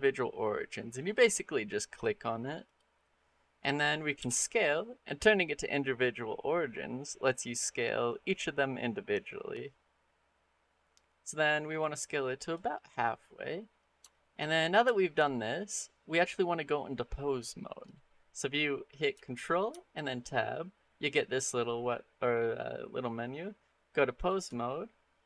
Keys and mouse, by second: 4.0 s, 13.9 shift+middle click, 14.7 shift+middle click, 15.6 middle click, 16.3 middle click, 19.5 ctrl+Tab, 25.1-25.2 middle drag.